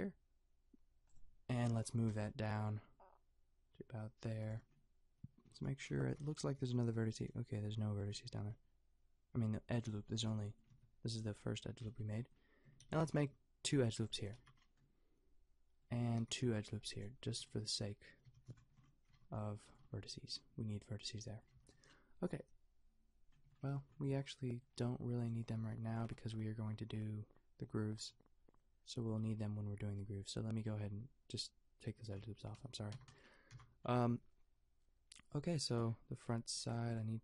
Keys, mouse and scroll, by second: 2.1 g, 4.6 Tab, 5.6 Tab, 8.3 g, 10.1 a, 10.7 Tab, 12.0 Tab, 13.1 ctrl+r, 14.4 a, 16.2 ctrl+r, 17.3 Tab, 18.3 a, 19.1 Tab, 19.8 a, 21.6 Tab, 23.8 Tab, 29.9 x, 32.0 a, 32.6 Tab, 32.9 a, 33.5 a, 36.6 click.